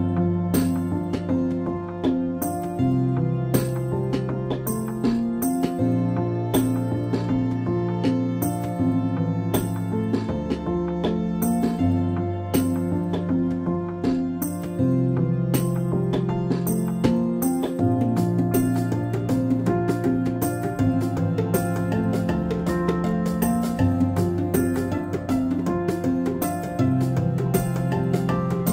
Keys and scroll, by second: 5.2 ctrl+v.